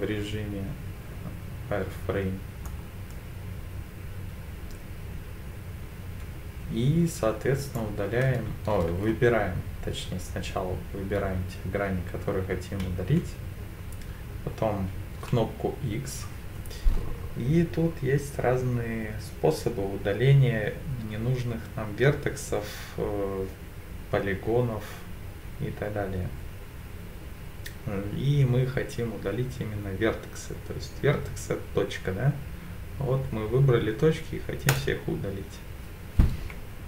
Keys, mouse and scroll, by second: 13.0 x, 15.2 x.